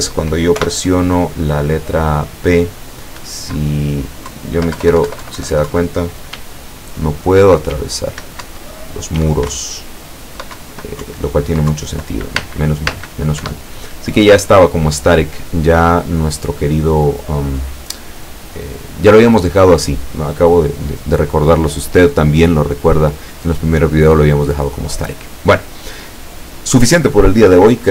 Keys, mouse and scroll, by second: 0.6 p, 3.3 Left, 4.3 Left, 6.4 w, 8.5 Up, 9.3 w, 9.6 Up, 10.6 Down, 11.1 Up, 11.8 Down, 12.5 space, 13.5 Escape.